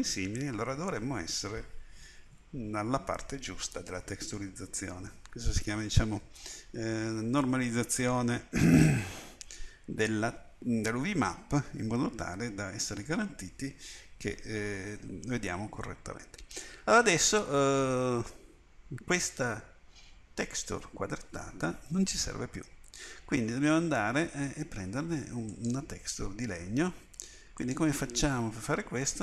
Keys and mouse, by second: 25.5-29.2 drag.